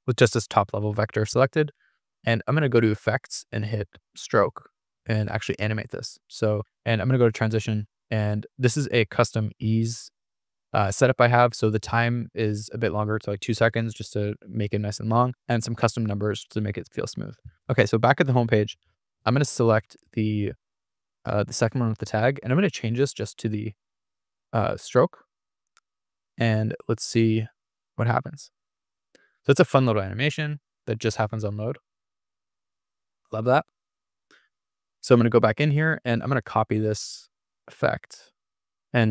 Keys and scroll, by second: 32.2 super+r, 34.7 Escape, 38.5 super+=.